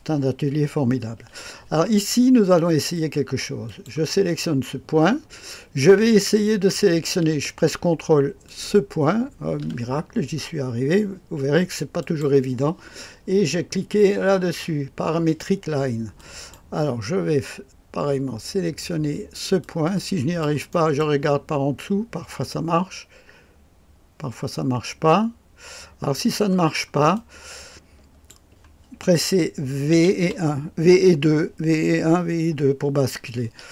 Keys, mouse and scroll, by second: 3.6 click, 8.4 ctrl+click, 11.9 click, 16.1 click, 19.5 click, 20.7 middle click, 26.6-27.1 scroll down 1, 27.1-28.3 drag, 29.9 v, 30.2 KP_2.